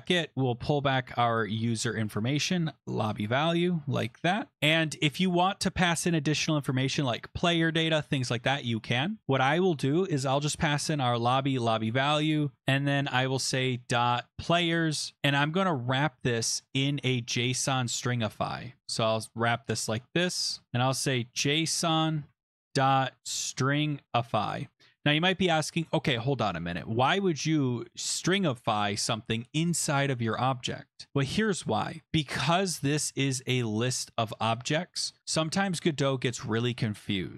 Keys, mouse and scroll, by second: 2.1 click, 2.8 ctrl+c, 4.2 click, 4.3 ctrl+v, 4.5 click, 4.8 click, 9.2 Left, 10.2 Right, 13.1 ., 14.3-15.9 typing, 17.1 click, 17.5 click, 19.4-25.6 typing, 22.3 Tab, 24.1 Tab, 33.9 click, 35.8 click.